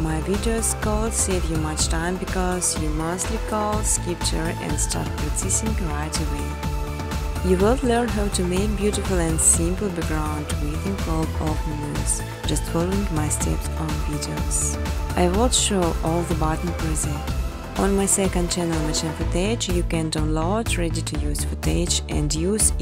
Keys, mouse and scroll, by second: 0.0-2.8 typing, 3.2 click, 5.3 right click, 6.4 click, 7.4-8.9 typing, 10.1 click, 12.3 click, 12.4 typing, 13.3 click, 14.2 click, 14.7 click, 15.6 click, 16.6-18.3 typing, 18.5 click, 19.8-20.5 typing, 20.0 click, 21.1 click, 22.0 click, 22.4 click.